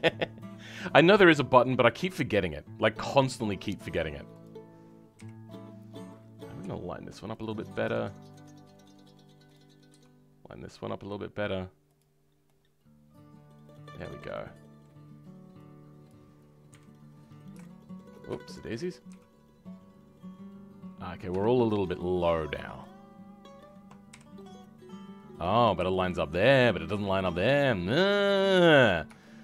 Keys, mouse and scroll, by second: 4.3 click, 5.1 KP_1, 5.5 scroll up 2, 6.5 g, 12.2 scroll down 2, 12.4 middle click, 13.2-14.2 middle drag, 14.3-16.0 middle drag, 16.0-17.1 drag, 17.1 scroll up 2, 18.4 shift+middle click, 19.0 g, 22.7 click, 24.0 KP_1, 25.7 KP_3, 26.4-29.1 scroll down 5, 29.1 shift+middle click.